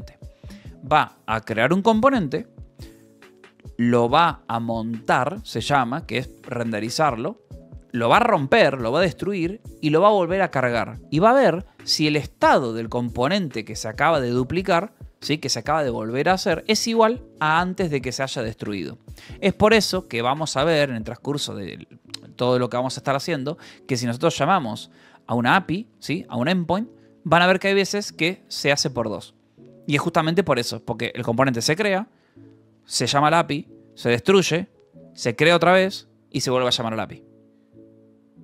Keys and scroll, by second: 19.9 Escape, 20.5 j, 21.2 o, 21.6 Return, 23.5-25.8 typing, 28.0 x, 28.2 space, 28.3 2.